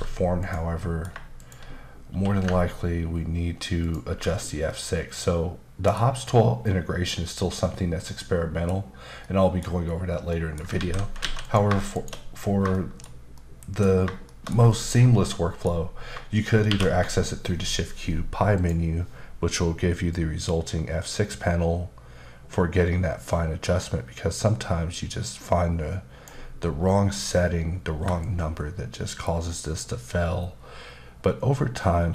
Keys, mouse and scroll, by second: 0.4 click, 0.8 middle click, 1.4 shift+click, 3.8 ctrl+click, 4.7 middle click, 8.2 middle click, 9.2 middle click, 9.8-10.3 scroll down 1, 10.3 middle click, 10.7 ctrl+z, 11.4 a, 11.4 click, 11.9 shift+click, 12.7 shift+middle click, 13.6 shift+b, 14.3 middle click, 16.7 shift+q, 18.5 click, 20.1 click, 28.2 shift+click.